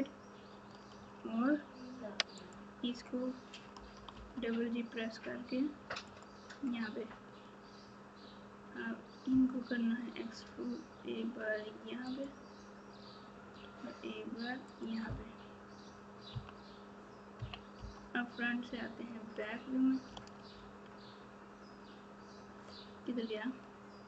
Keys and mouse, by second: 0.9 1, 6.0 g, 9.3 e, 13.5 e, 16.3 KP_3, 17.3 KP_1, 20.1 alt+z.